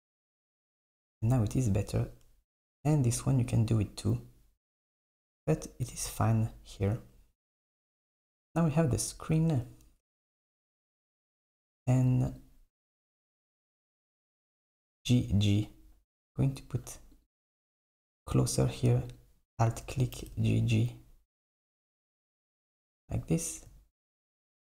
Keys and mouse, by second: 1.1 Tab, 2.5 click, 2.9 Tab, 5.9 Tab, 7.0 Tab, 9.4 Tab, 12.0 click, 12.3 alt+click, 12.9 click, 13.2 alt+click, 14.7 g, 18.0 click, 19.1 alt+click, 20.2 g.